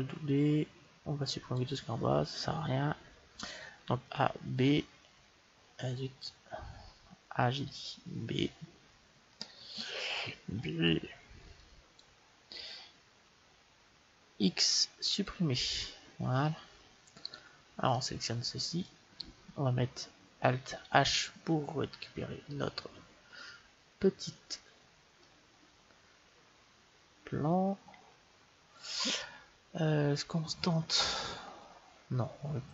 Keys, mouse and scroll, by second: 3.6 b, 7.4 a, 8.2 space, 10.2 b, 14.3 x, 16.3 middle click, 17.2-18.9 right drag, 17.8-20.7 middle drag, 20.7 alt+h, 21.9-24.1 middle drag.